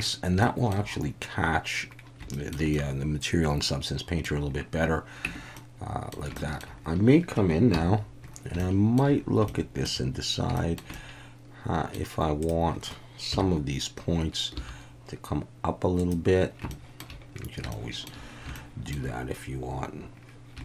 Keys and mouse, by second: 0.4 shift+middle drag, 2.3 shift+middle click, 2.7-4.2 middle drag, 5.2 Tab, 5.5 middle click, 6.4 shift+middle click, 7.7 KP_1, 8.6 shift+middle click, 9.5 shift+middle click, 10.6 shift+middle click, 10.9-11.9 middle drag, 12.4 click, 13.3 KP_1, 14.6 g, 16.0 click, 16.7 shift+middle click, 17.7 shift+middle click, 18.5 shift+middle click.